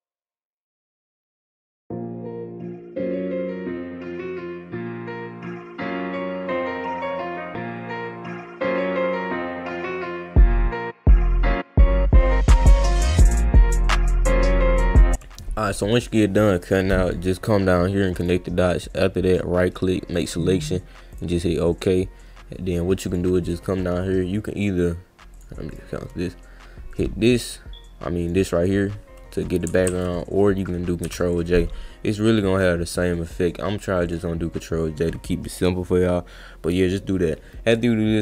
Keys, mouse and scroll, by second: 0.3 click, 0.6 click, 0.9 ctrl+z, 1.2 click, 1.3 ctrl+z, 1.5 click, 1.7 ctrl+z, 1.7 click, 2.0 click, 2.3 click, 2.6 click, 2.8 ctrl+z, 2.9 click, 3.2 click, 3.4 click, 3.8 alt+click, 3.9 click, 4.1 click, 4.3 click, 4.4-4.9 scroll up 2, 4.9 drag, 5.2 click, 5.3 ctrl+z, 5.4 click, 6.0 drag, 6.4 alt+click, 6.5 click, 6.6 scroll up 1, 6.9 click, 7.1 ctrl+z, 7.2 click, 7.6 alt+click, 7.8 click, 8.0-8.4 scroll up 1, 8.4 click, 9.0 click, 9.2 click, 9.7 click, 9.8 click, 10.0 click, 10.2 click, 10.4 click, 10.6 drag, 10.8 click, 11.2 click, 11.4 click, 11.7 click, 11.8 scroll up 2, 12.0 drag, 12.2 click, 12.7 click, 12.8 click, 13.3 drag, 13.6 click, 13.8 drag, 14.1 click, 14.4 click, 14.6 click, 14.7 click, 17.0 click, 18.2 click, 19.3 right click, 20.1 click, 21.1 click, 23.1 click, 23.4 click, 25.3 click, 25.7 click, 26.9 click, 28.2 click, 29.9 ctrl+z, 32.1 click, 34.0 click, 36.7 click.